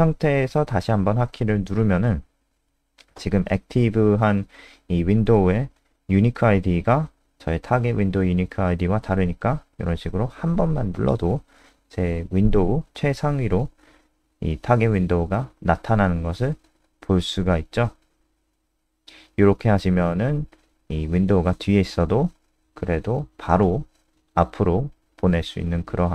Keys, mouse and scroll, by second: 7.1 KP_0, 13.2 click, 14.8 KP_0, 19.4 click, 21.1 scroll down 2, 22.5-23.6 scroll down 2, 23.9-24.3 scroll down 2, 24.4 click, 24.9 ctrl+a, 25.1 Delete, 25.5-26.1 scroll up 8, 25.9 click.